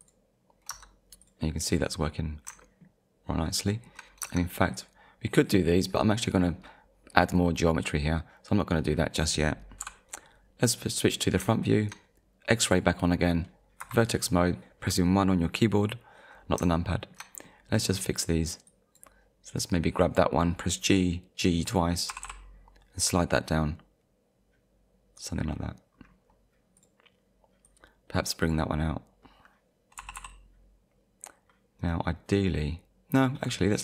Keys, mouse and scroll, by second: 0.7 Tab, 1.2 click, 1.8-2.2 scroll down 1, 2.6 shift+middle click, 3.3 shift+middle click, 4.2 Tab, 4.7 click, 8.4-8.8 scroll up 1, 9.8 KP_1, 11.2-11.6 scroll up 2, 11.6 shift+middle click, 12.7 click, 13.3-13.6 scroll up 1, 13.8 1, 16.9 shift+middle click, 17.4-17.8 scroll up 1, 17.9-18.3 scroll up 1, 18.7 click, 22.1 g, 25.2 click, 25.9-26.3 scroll down 1, 26.8 click, 27.7 click, 30.0 g, 31.8 right click, 32.3 scroll up 1, 33.2 scroll down 1.